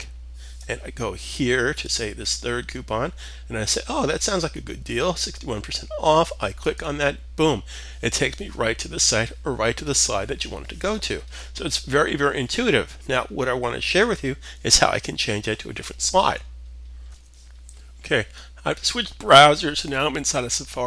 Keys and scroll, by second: 16.3 alt+Tab, 16.3 typing.